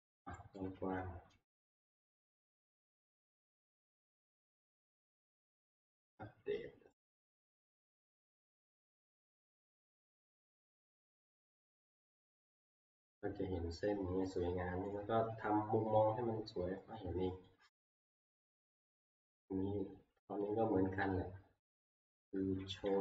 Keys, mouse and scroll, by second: 0.6 middle click, 0.8 s, 1.5 alt+Tab, 3.6 F5, 5.5 click, 7.0 click, 8.2 click, 11.6 click, 12.0 middle click, 12.1 middle click, 12.5 middle click, 12.6 middle click, 14.9-16.5 scroll, 16.5-16.9 scroll, 17.5-18.0 scroll, 18.4 middle click, 19.1 middle click, 19.5 middle click, 19.6 middle click, 19.6 middle click, 20.2 middle click, 20.2 middle click, 20.6 middle click, 20.7-21.6 scroll, 22.3 scroll, 22.7 t, 22.8 shift+scroll.